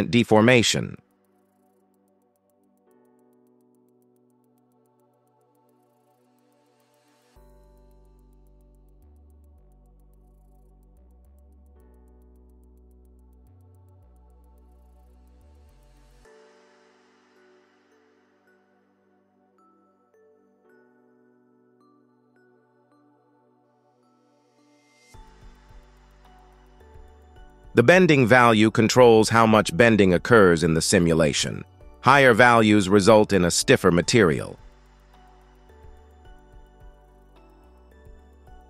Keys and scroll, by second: 17.3 KP_0, 35.6 space.